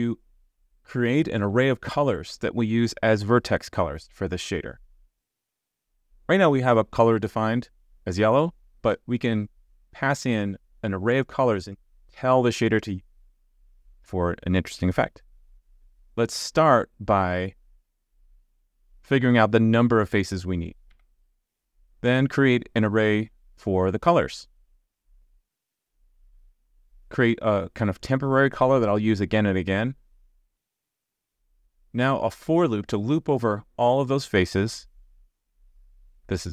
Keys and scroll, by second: 13.9 super+s, 15.7 super+z, 20.9 super+z, 25.4 super+z, 31.2 super+z, 34.3 super+z.